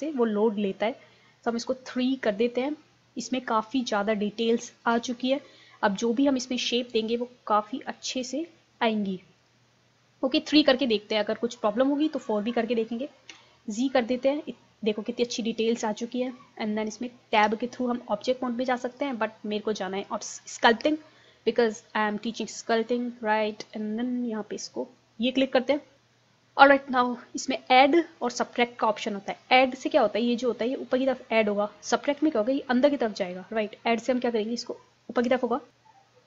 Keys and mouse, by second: 0.0-1.4 drag, 1.6 click, 3.3 middle click, 5.0 KP_1, 6.3-7.4 middle drag, 7.9-11.2 drag, 13.3 z, 15.1-17.1 drag, 17.4 Tab, 20.1 click, 24.4-26.0 drag, 27.0-35.7 drag.